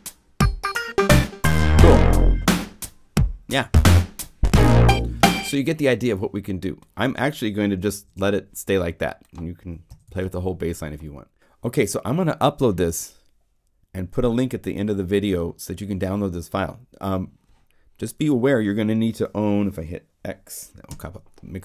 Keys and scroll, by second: 7.8 super+Left, 9.9 super+Left, 20.8 x.